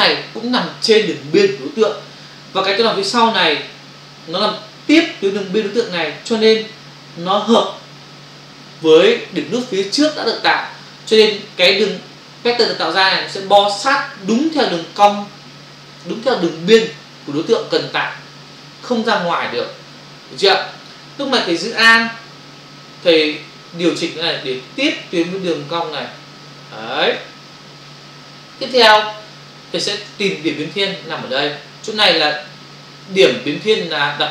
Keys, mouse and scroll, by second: 23.9 alt+click, 29.2 space.